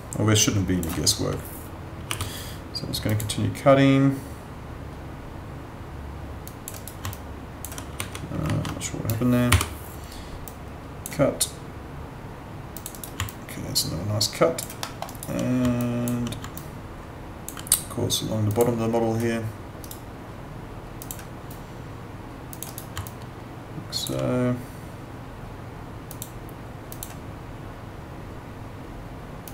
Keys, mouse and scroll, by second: 2.0 y, 3.1 click, 6.5 click, 6.7 right click, 7.1 alt+click, 8.0 w, 9.5 y, 10.4 click, 12.9 right click, 13.2 alt+click, 14.8 alt+middle click, 15.1 alt+right click, 15.8 alt+click, 16.6 alt+click, 19.8 right click, 21.0 click, 22.6 right click, 23.0 alt+click, 26.1 click.